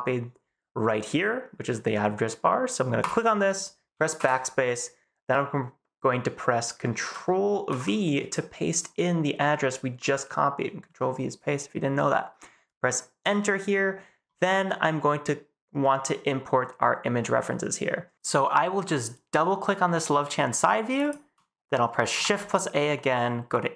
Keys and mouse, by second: 22.1 shift+a.